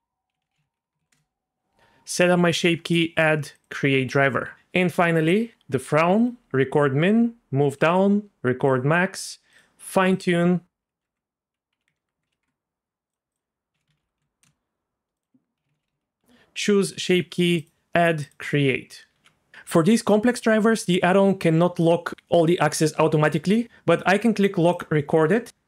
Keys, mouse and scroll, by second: 2.8 click, 3.5 click, 4.5 g, 5.2 click, 6.2 click, 7.1 click, 8.7 click, 9.1 click, 9.5 click, 10.1-12.4 drag, 13.3-14.4 drag, 15.2-16.2 drag, 17.6 click, 18.2 click, 19.1 g, 19.5 g, 20.3-22.1 right drag, 24.7 click.